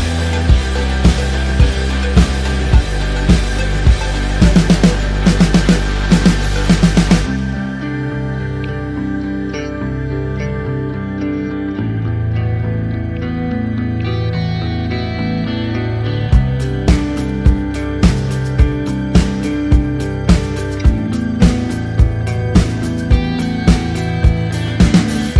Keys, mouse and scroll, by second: 3.7 click, 6.5 ctrl+click, 8.5 ctrl+click, 9.1 ctrl+t, 10.1 click, 11.1 KP_Enter, 11.3 a, 11.9 click, 13.7 KP_Enter, 14.4 KP_Enter, 14.5-15.8 scroll up 1, 15.8 scroll up 1, 16.1 click, 16.3-16.7 typing, 17.2 ctrl+click, 18.0 click, 18.3 ctrl+[, 19.0 ctrl+click, 19.4 ctrl+g, 19.9 click, 20.4-23.3 typing, 22.1 ctrl+a, 23.3 click, 24.5 ctrl+d, 24.9 Down.